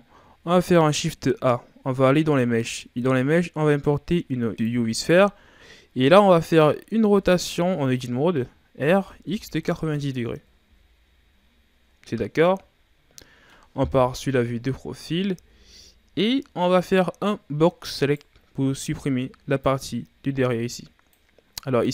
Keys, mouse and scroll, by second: 0.5 shift+a, 5.5-6.3 scroll up 5, 7.0 Tab, 8.7 r, 12.3-12.8 scroll down 4, 13.1 middle click, 13.8 KP_3, 14.7-15.2 ctrl+scroll down 6, 15.2 z, 15.8-16.9 shift+scroll up 4, 17.8 right click, 18.8 b.